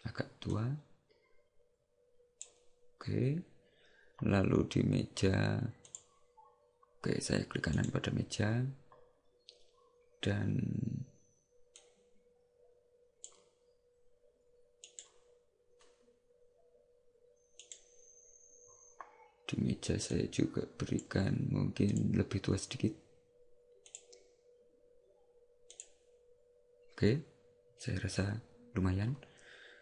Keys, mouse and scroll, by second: 6.1 click, 7.9 right click, 11.9 click, 15.0 right click, 17.9 right click, 20.2 click.